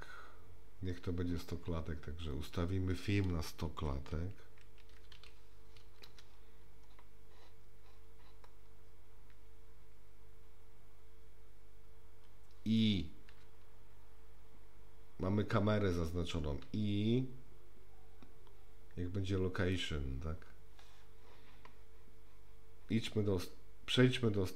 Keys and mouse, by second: 2.3-6.9 drag, 5.2 KP_0, 13.3 i, 16.6 i.